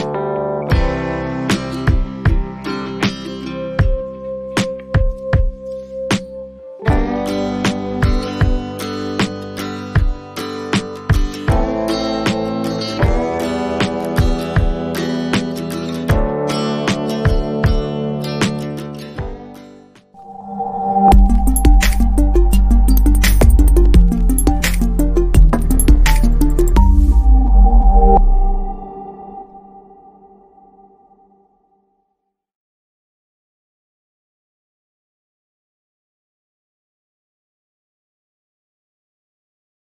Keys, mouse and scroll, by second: 0.3 click, 1.8 ctrl+t, 4.5 click, 5.3 click, 5.4 click, 6.3 6, 6.4 6, 6.8 Return, 7.9 click, 11.5 click, 15.6 click, 16.3 click, 18.2 click.